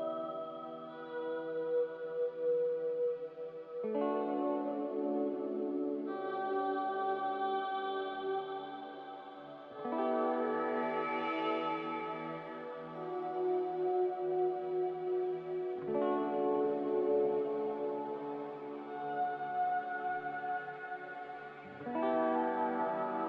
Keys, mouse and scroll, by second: 3.5-4.2 typing, 9.8-12.2 typing, 16.7 Delete, 18.4 Delete, 21.8-22.6 typing.